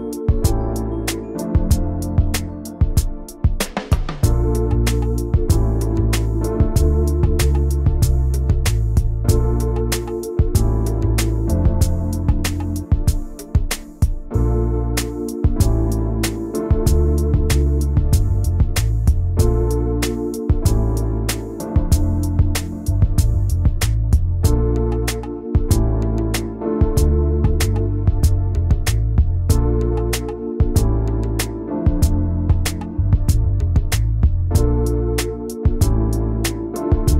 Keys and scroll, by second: 0.0-1.4 typing, 6.5-7.4 typing, 10.3 alt+Left, 11.7 alt+Left, 12.0 alt+Right, 27.6 \, 29.9 a, 30.7 v, 34.9 shift+m.